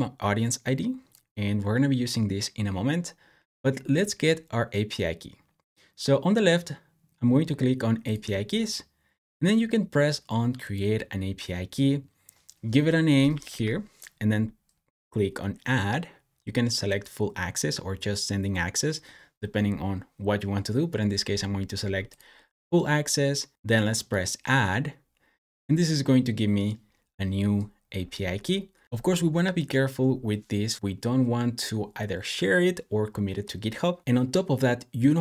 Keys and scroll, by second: 13.0-13.9 typing.